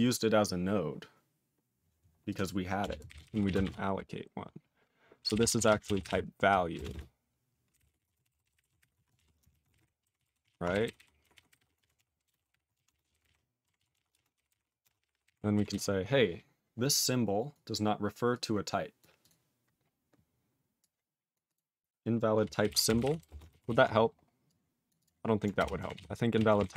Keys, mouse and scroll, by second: 2.3 click, 2.4 click, 2.8 Return, 2.8-9.7 typing, 9.7 ctrl+e, 9.8 ctrl+g, 10.2 ctrl+s, 10.4 ctrl+e, 10.7 alt+b, 10.9 alt+b, 11.0 alt+b, 11.3-13.1 typing, 13.2 ctrl+g, 13.3 ctrl+e, 13.9 ctrl+s, 14.0 ctrl+a, 14.1 ctrl+space, 14.2 ctrl+e, 14.4 ctrl+n, 14.5 ctrl+g, 14.6 ctrl+e, 14.6 ctrl+n, 14.8 ctrl+space, 14.9 ctrl+p, 15.0 ctrl+p, 15.1 ctrl+p, 15.3 ctrl+g, 15.3 ctrl+e, 15.7 ctrl+s, 16.8 click, 17.5 click, 18.3 click, 19.0 click, 19.3 click, 19.8 click, 20.8 click, 21.3 click, 21.5 click, 21.5 click, 22.4-23.7 typing, 23.8 ctrl+s, 24.5 click, 24.9 click, 25.0 click, 25.0 click, 25.6 ctrl+BackSpace, 26.0 ctrl+s, 26.4 ctrl+a, 26.5 ctrl+space, 26.6 ctrl+e, 26.6 ctrl+g.